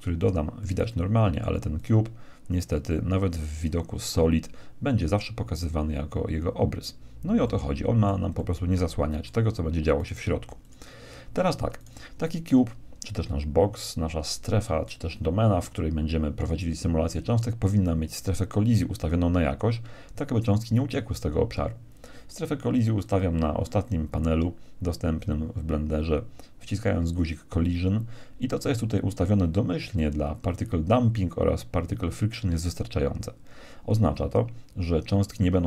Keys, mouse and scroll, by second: 0.5-1.7 middle drag, 1.7-3.7 right drag, 3.5-5.5 drag, 7.4-9.9 middle drag, 9.9-13.7 right drag, 10.5 x, 23.0-24.9 drag, 27.0-29.0 drag.